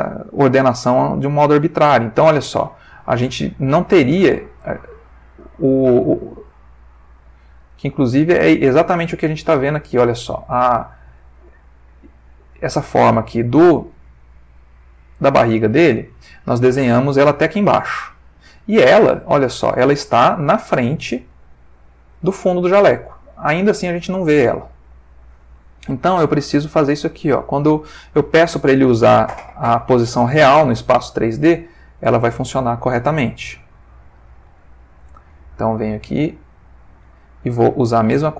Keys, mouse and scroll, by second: 1.0-5.3 middle drag, 5.4-7.8 middle drag, 7.9-10.4 ctrl+middle drag, 10.7-11.1 drag, 11.6 g, 12.6 Escape, 13.0-14.1 middle drag, 15.0 click, 16.0-16.7 ctrl+middle drag, 18.4-20.8 middle drag, 22.4 middle click, 23.3 middle click, 26.5 click, 30.6 click, 31.6-34.5 middle drag, 34.6 ctrl+middle click, 36.4 click, 37.6 click.